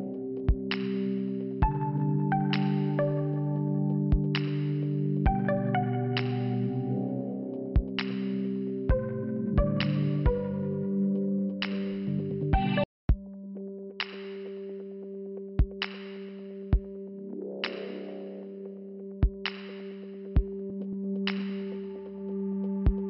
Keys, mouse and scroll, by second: 0.4 click, 0.6 click, 1.5 click, 5.5 click, 5.6 click, 7.2 right click, 7.4 right click, 7.8 click, 7.9 right click, 8.1 click, 9.5 click, 9.6 click, 10.9 click, 10.9 click, 11.8 click, 12.8 click, 13.8 click, 13.9 click, 14.7 click, 15.2 click, 15.4 click, 15.5 typing, 15.8 click, 15.9 click, 17.8 click, 17.9 click, 18.7 click, 20.0 click, 20.1 click, 20.7 click, 20.7 click, 21.8 click, 21.9 click, 22.3 click.